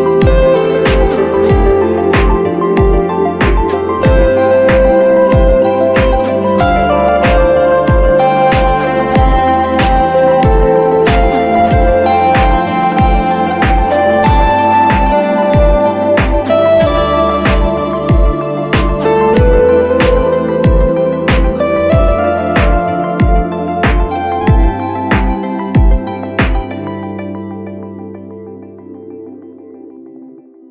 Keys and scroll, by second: 9.5 g, 11.4 b, 16.1 x.